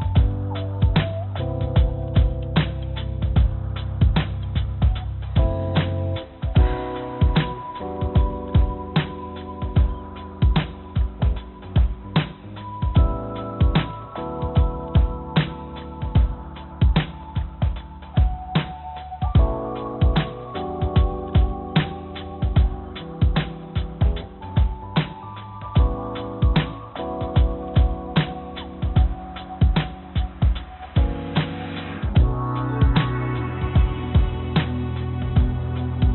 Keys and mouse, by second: 0.1 click, 1.5 Tab, 1.7 Tab, 2.5 g, 4.6 click, 5.2 click, 6.0 click, 6.7 click, 8.0 g, 9.4 ctrl+z, 9.6 ctrl+z, 9.7 ctrl+z, 9.9 ctrl+z, 10.1 ctrl+z, 10.2 ctrl+z, 10.8 ctrl+z, 10.9 ctrl+z, 11.1 ctrl+z, 11.2 ctrl+z, 11.4 ctrl+z, 11.6 ctrl+z, 12.0 ctrl+z, 13.0 click, 13.5 g, 16.6 click, 17.5 g, 21.4 click, 22.4 click, 23.1 click, 23.5 click, 24.3 click, 24.8 3, 26.0 i, 27.6 i, 30.3 y, 31.4 e, 32.6 e, 35.5 ctrl+z, 35.7 ctrl+z.